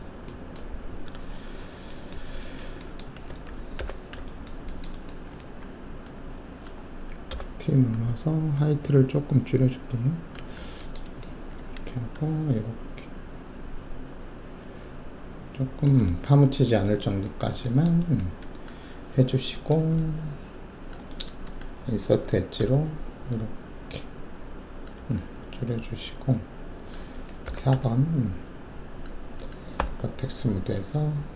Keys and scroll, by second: 3.7 alt+5, 7.3 t, 11.5 ctrl+alt+w, 22.6 alt+e, 27.4 alt+4, 29.7 alt+1, 31.1 w.